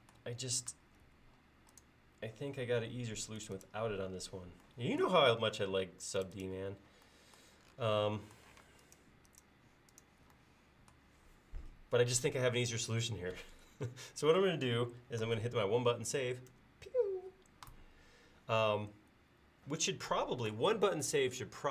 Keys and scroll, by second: 1.1 a, 8.7 space, 16.6 ctrl+s.